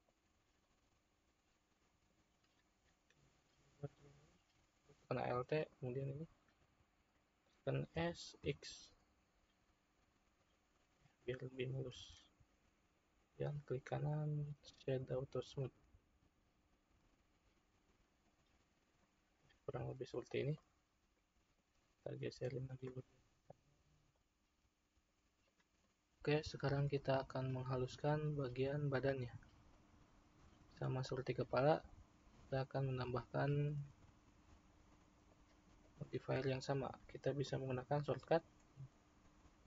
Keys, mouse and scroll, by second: 0.5-4.0 middle drag, 4.0-5.6 drag, 8.0 s, 11.9 Tab, 13.3-15.6 right drag, 15.6-18.5 middle drag, 19.0-21.4 middle drag, 21.4 click, 22.2 click, 23.1-24.1 middle drag, 24.1 click, 25.3 click, 25.9-26.2 middle drag, 35.8 click.